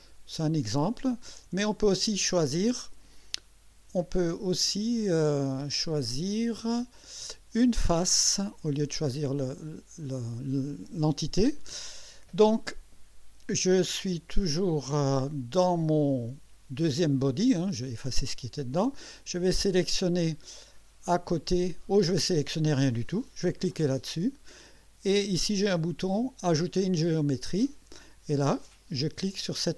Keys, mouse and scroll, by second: 1.4 click, 2.4 ctrl+click, 3.6 Delete, 6.7 click, 7.7 click, 8.5 Delete, 9.4 click, 10.9 click, 23.8 click, 26.9 click, 28.7 click.